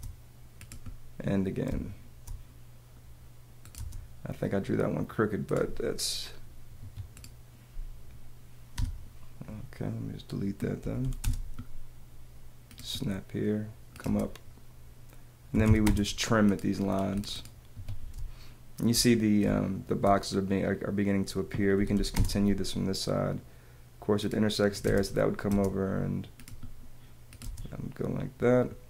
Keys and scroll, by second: 1.7 space, 3.7 space, 6.8 Escape, 8.7 BackSpace, 10.8 p, 14.0 space, 15.5 t, 17.7 Escape, 18.4 space, 21.5-22.4 typing, 24.8 space, 27.4 space.